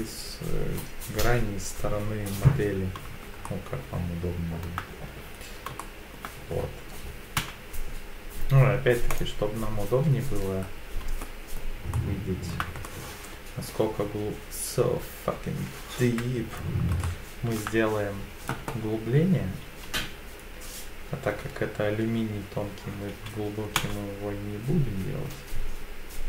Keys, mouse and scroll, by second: 1.1 KP_1, 1.8 KP_3, 3.4-4.6 shift+middle drag, 3.4 shift+scroll up 1, 5.8 shift+middle click, 7.4 z, 10.6-11.2 scroll up 3, 11.2 shift+middle click, 11.9 shift+middle click, 12.8 middle click, 16.7 KP_1, 17.0 shift+middle click, 17.0 shift+scroll up 1, 19.8 e, 23.8 z.